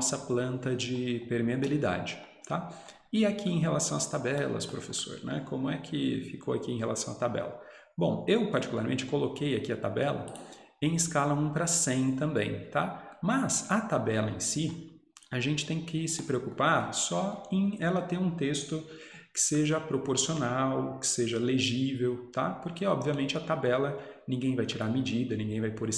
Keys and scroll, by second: 14.7 Escape.